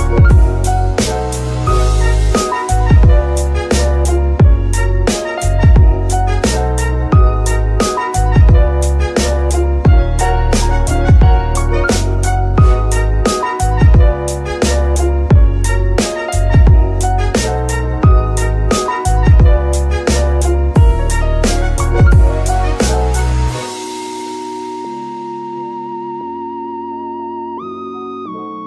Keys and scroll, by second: 0.5 r, 0.9 Escape, 2.5 KP_Decimal, 10.3 Tab, 11.2 z, 12.8 Tab, 13.4 z, 14.3 g, 14.5 y, 17.5 Escape, 22.3 shift+a, 26.1-26.6 typing, 27.6-28.6 typing.